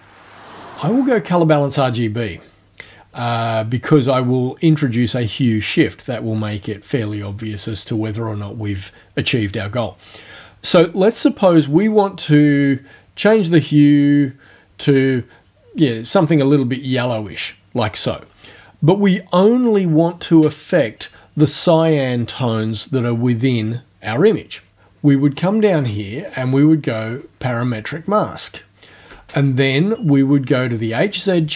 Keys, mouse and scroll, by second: 0.5 click, 12.4-18.5 drag, 24.8-26.3 ctrl+alt+scroll down 2, 27.2 click, 28.7 ctrl+alt+scroll down 2, 30.7 click.